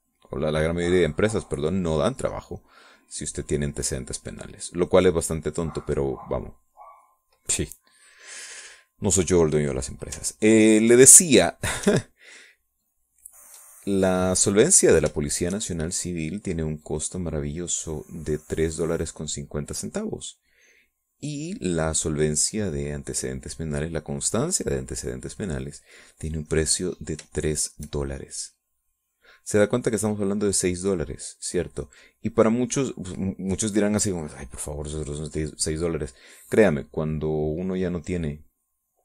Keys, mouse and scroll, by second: 8.8 middle click, 9.2-10.6 middle drag, 11.5 ctrl+click, 14.0 ctrl+click, 16.2 shift+click, 16.8-21.7 shift+drag, 22.3 middle click, 23.5-27.0 drag, 27.3-29.0 drag, 29.0-32.6 shift+drag, 32.7-35.4 drag, 35.8 middle click, 36.4 middle click, 37.2 middle click, 38.7-39.0 drag.